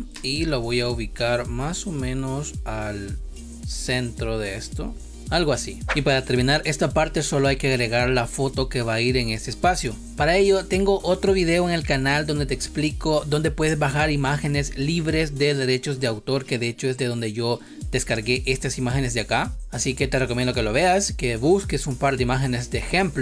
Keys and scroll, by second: 0.1 space.